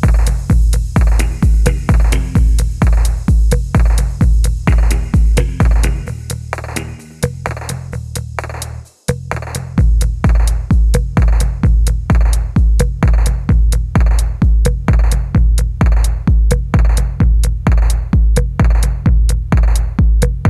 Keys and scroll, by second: 0.7 r, 3.2 ctrl+1, 4.1 typing, 5.6 typing, 6.9 ctrl+1, 8.2 typing, 9.7 typing, 10.6 Tab, 11.5 g, 12.7 g, 14.1 ctrl+z, 14.2 ctrl+z, 14.9 ctrl+r, 17.3 typing, 19.1-20.4 typing.